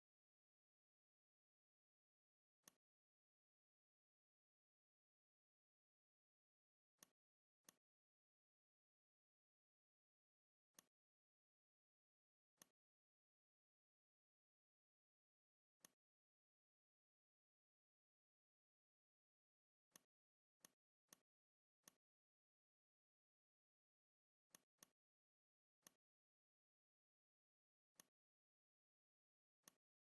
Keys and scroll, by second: 1.6 shift+c, 6.5 v, 19.4 v, 23.1 Delete, 29.4 r.